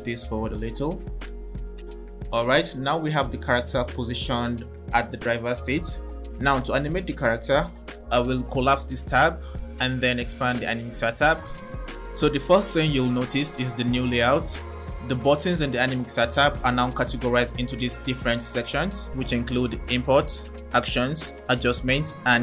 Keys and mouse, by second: 8.2 click, 10.2 click.